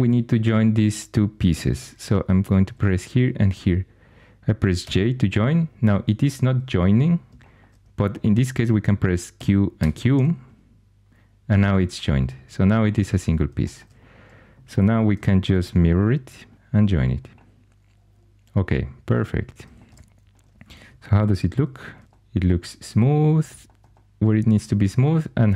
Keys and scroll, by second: 1.5 4, 4.8 j, 9.3-9.7 typing, 15.4 alt+x, 16.5 typing, 21.2 shift+h, 22.0 shift+super+e.